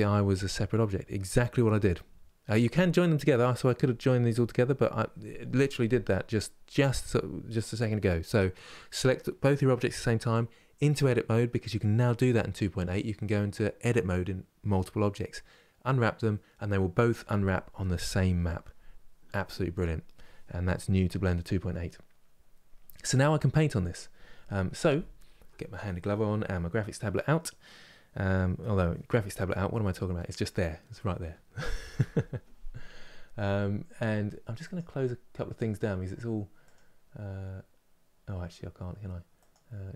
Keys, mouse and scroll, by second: 21.7 scroll down 1.